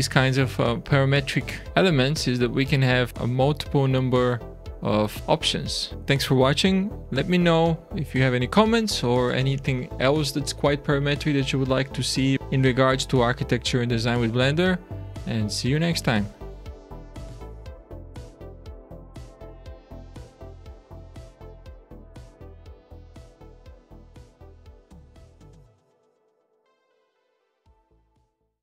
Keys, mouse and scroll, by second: 1.1 shift+middle click, 3.9 click, 5.2 click, 5.2 shift+middle click, 5.3 alt+a, 5.7 scroll down 2.